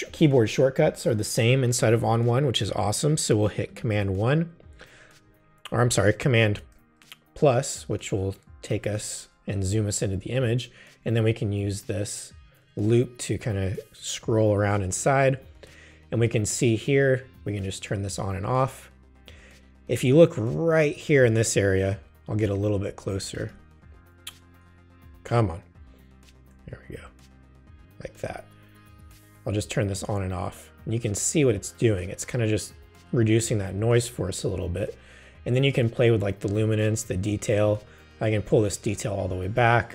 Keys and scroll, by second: 4.0 super+i, 5.2 super+i, 6.6 super+=, 8.0 super+=, 21.9 super+=, 22.5 super+space, 25.1 super+=.